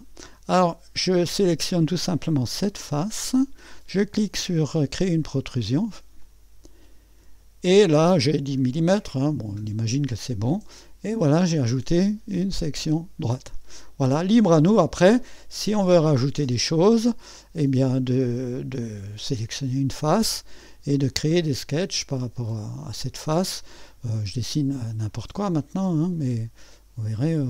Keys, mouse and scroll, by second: 0.0-0.6 scroll up 1, 0.6 right click, 2.5 click, 6.2 click, 9.0 click, 10.0 scroll, 10.8-14.4 drag, 14.6 click, 19.1 click, 21.1 click, 25.0 click, 27.2 click.